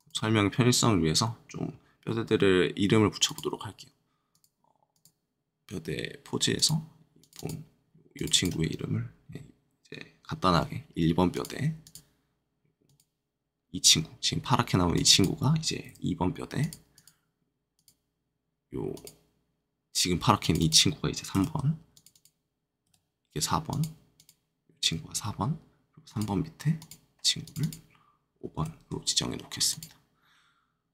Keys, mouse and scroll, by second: 10.5 1, 11.3 click, 11.8 click, 15.8 2, 16.5 click, 16.9 click, 21.3 3, 21.9 click, 22.1 click, 22.8 4, 23.6 click, 24.1 click, 28.5 5, 29.6 click.